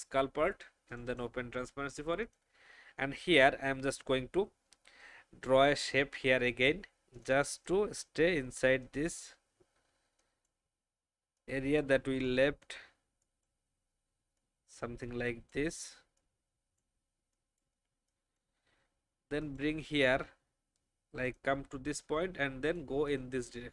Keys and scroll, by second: 12.1 space.